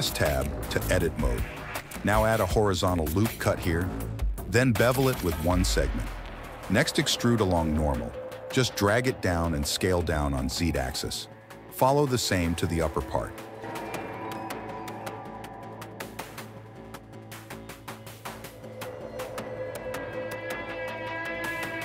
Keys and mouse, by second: 1.6 ctrl+z, 2.1 ctrl+r, 4.2 click, 4.7 ctrl+b, 7.4 alt+e, 10.1 s, 13.4 Tab, 14.3 click, 15.0 Tab, 16.6 ctrl+r, 18.4 ctrl+b, 19.9 click, 21.0 ctrl+z, 21.5 alt+e.